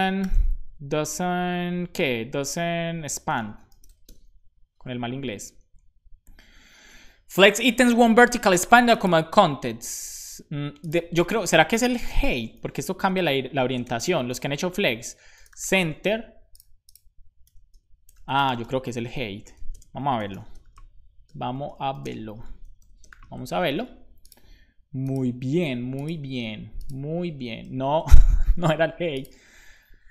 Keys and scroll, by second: 11.6-13.6 typing, 13.0 Return, 14.9-16.1 typing, 17.4-23.5 typing, 17.6 Return, 19.0 Return, 23.5 super+s.